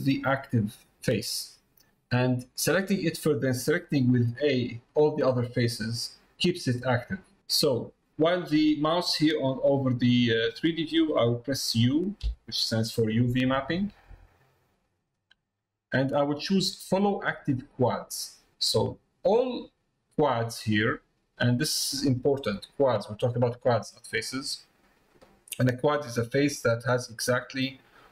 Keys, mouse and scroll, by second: 9.9 middle click.